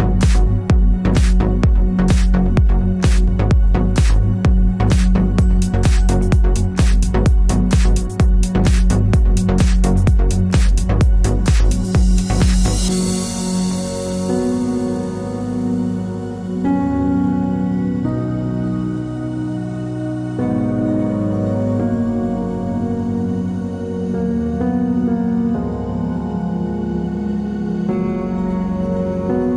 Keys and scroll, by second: 1.2-3.3 typing, 6.8-7.5 typing, 8.6-9.3 typing, 11.2-11.9 typing, 14.0-14.8 typing, 20.1-21.8 typing, 27.1-28.2 typing.